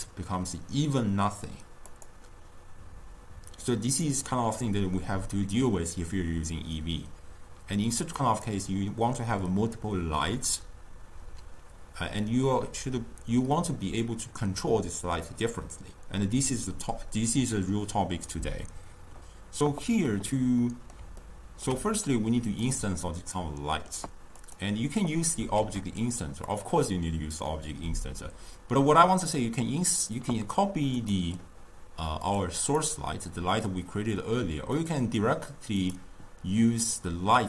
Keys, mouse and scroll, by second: 2.1 click, 20.1-22.6 middle drag, 22.6 click, 23.4-24.4 middle drag, 24.4 click, 26.1 shift+d, 31.1 click, 32.4 click, 32.9 click, 35.3 click, 35.9-37.4 drag.